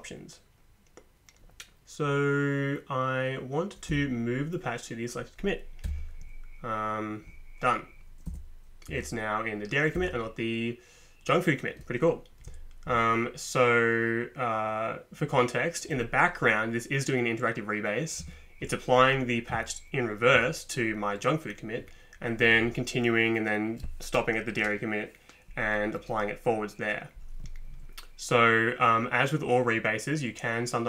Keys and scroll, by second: 3.9 Down, 5.9 Return, 8.3 Down, 8.9 Up, 10.0 Down, 12.9 Up, 18.2 Down, 22.4 Up.